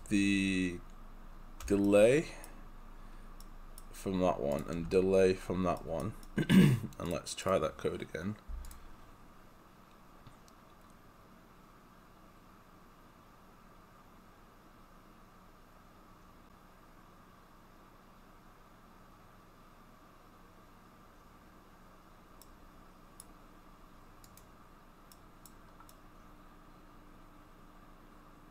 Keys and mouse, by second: 1.7 Delete, 1.9 right click, 4.6 click, 4.8 Delete, 5.8 right click, 7.1 click, 23.6 right click, 24.3 click, 25.2 right click.